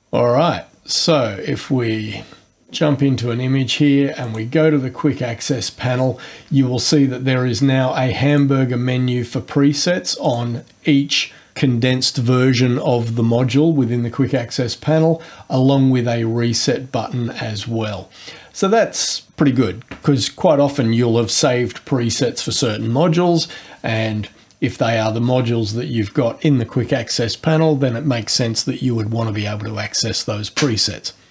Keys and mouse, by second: 4.2 click, 8.3 click, 10.2 click.